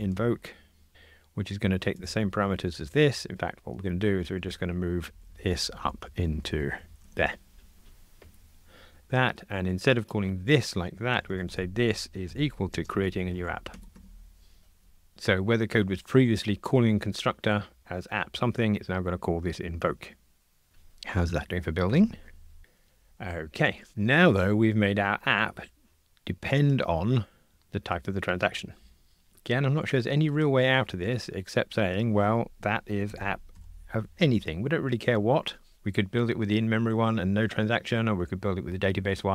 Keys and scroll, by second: 5.2 alt+shift+Down, 8.4 super+BackSpace, 13.8 Escape, 21.9 super+F9.